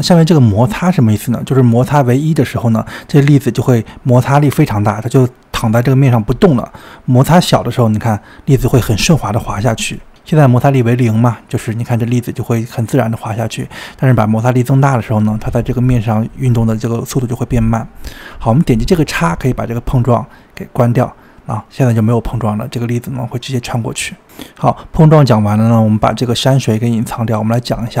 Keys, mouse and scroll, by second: 1.3-4.3 drag, 6.4-9.3 drag, 14.8-17.8 drag, 18.4-21.4 drag, 21.4-21.9 scroll down 2, 21.9-24.8 middle drag, 24.8 click, 25.4-26.5 middle drag, 26.5-28.0 scroll up 1.